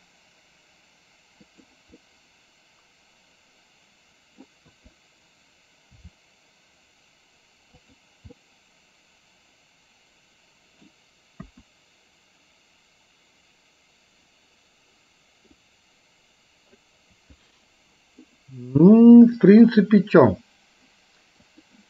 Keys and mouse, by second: 2.1-4.5 middle drag, 4.8 KP_3, 6.0 r, 8.5-10.9 middle drag, 11.5 KP_1, 15.9-17.0 drag, 19.5 click, 21.6 click.